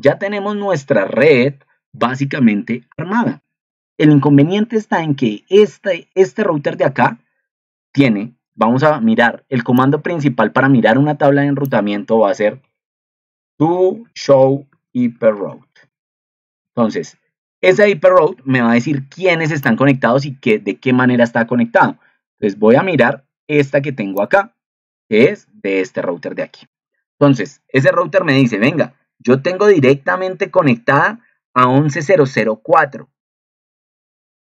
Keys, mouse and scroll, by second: 7.6 ctrl+2, 25.2 ctrl+2.